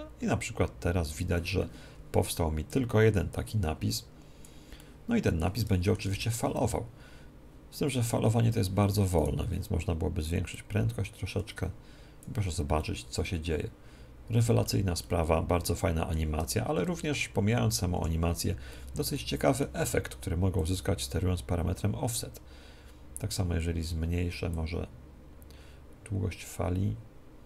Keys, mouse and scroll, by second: 1.1-4.7 drag, 4.7-6.4 middle drag, 6.0 alt+a, 9.1-12.1 right drag, 10.5-12.7 drag, 12.7-14.4 middle drag, 14.9-16.9 middle drag, 17.9 Escape, 18.6-20.5 middle drag, 20.5-27.4 drag.